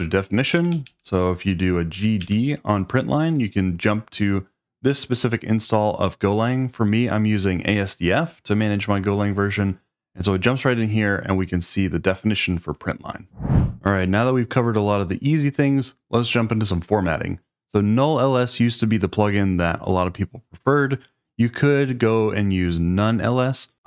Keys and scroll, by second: 0.6-2.7 typing.